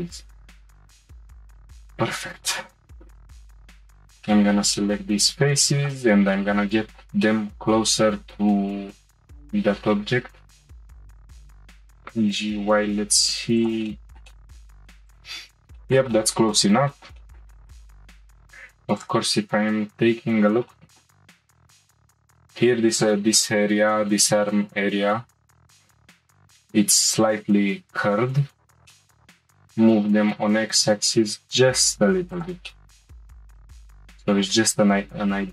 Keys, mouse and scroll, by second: 1.0 middle click, 1.2-2.7 middle drag, 3.7 shift+click, 4.3-5.8 shift+middle drag, 5.8 shift+click, 6.3-8.9 middle drag, 8.9 g, 13.9-14.9 middle drag, 14.9 g, 15.4-15.7 scroll down 2, 15.7-17.8 shift+middle drag, 17.9-19.0 shift+middle drag, 19.0 click, 20.7 shift+middle click, 21.3-21.6 scroll up 2, 21.6-24.2 shift+middle drag, 26.2-27.8 scroll down 2, 28.9 shift+middle click, 29.7 g, 32.7-34.8 middle drag, 34.8 g.